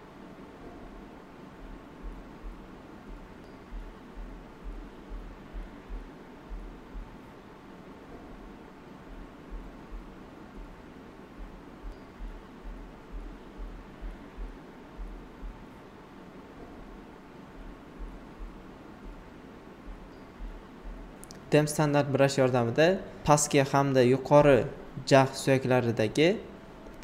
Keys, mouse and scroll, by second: 1.5-3.1 shift+drag, 3.1 alt+right click, 5.8 alt+right click, 7.6 alt+right click, 12.1 click, 12.8-14.7 shift+drag, 14.7 shift+click, 15.5-17.8 typing, 17.0 alt+right click, 17.7 click, 18.2 alt+right click, 19.8 typing, 20.4 click, 21.9 space, 22.0 click, 22.4 space, 24.0 click, 24.9 click, 25.6 shift+click, 26.4 alt+right click.